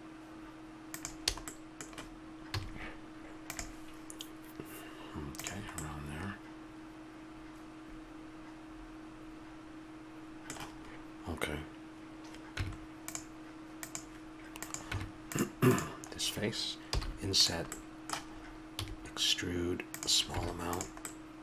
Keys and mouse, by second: 2.5 a, 5.5 a, 6.2 middle click, 6.6-7.9 middle drag, 9.1 middle click, 12.6 Tab, 14.9 Tab, 16.8 i, 18.7 e, 19.8 click, 20.3 Tab.